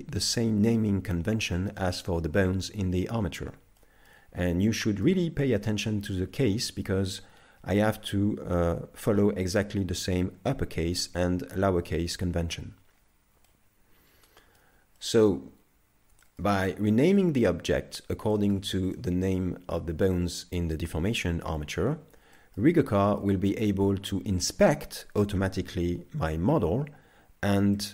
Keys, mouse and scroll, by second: 3.8 shift+middle click, 4.5-4.8 scroll down 1, 4.8 shift+middle click, 13.5 middle click, 15.0 shift+middle click, 15.5-16.3 scroll down 3, 16.3 shift+middle click, 16.7 middle click, 18.3 shift+middle click, 19.0 middle click, 22.4 shift+middle click, 22.8 middle click, 27.8 shift+middle click.